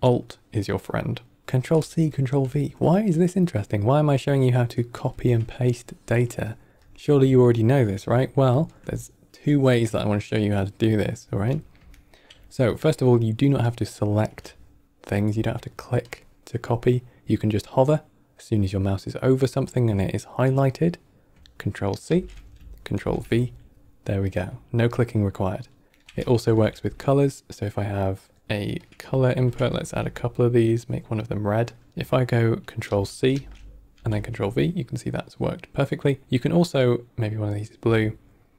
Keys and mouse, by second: 1.4 middle click, 1.9 ctrl+middle click, 2.5 middle click, 3.2 middle click, 4.0-4.3 drag, 5.0 x, 5.6-6.4 drag, 6.9 middle click, 7.4 ctrl+middle drag, 8.0 middle click, 8.4 click, 11.4 middle click, 11.9 ctrl+middle click, 12.4 middle click, 12.7 click, 13.5-16.0 drag, 22.0 ctrl+c, 22.9 ctrl+v, 25.9 middle click, 26.4 shift+a, 29.1 ctrl+middle click, 29.5 middle click, 29.7 shift+d, 30.7 click, 32.8 ctrl+c, 33.8 ctrl+c, 33.8 ctrl+v, 37.1 click.